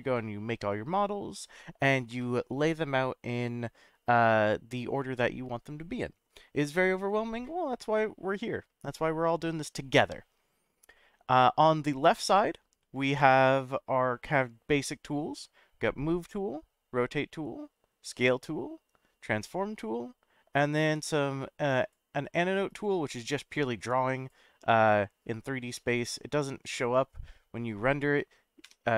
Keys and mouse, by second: 21.8 click, 22.7-24.3 drag, 24.7-27.5 middle drag, 27.6 middle click.